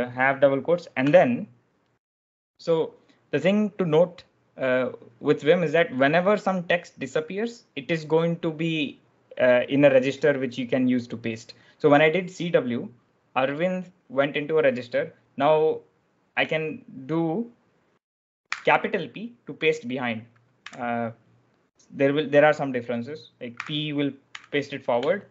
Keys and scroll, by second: 1.0 Escape, 18.4 shift+p, 20.5 u, 23.4-25.3 typing.